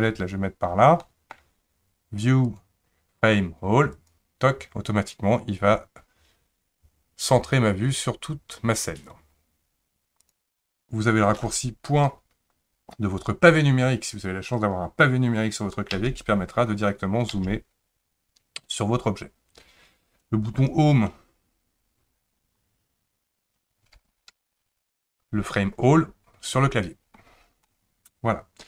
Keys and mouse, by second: 1.0-1.3 middle drag, 2.4-4.1 drag, 10.2 click, 15.9 KP_Decimal, 17.3 KP_Decimal, 24.3 Home, 27.7-28.6 middle drag.